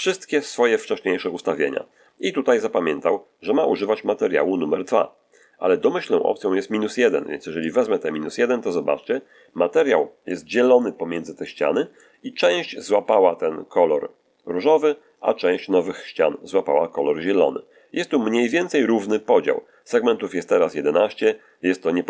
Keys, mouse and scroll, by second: 6.9 click, 9.6 middle click, 10.6 middle click, 11.3 middle click, 12.2-12.6 scroll up 2.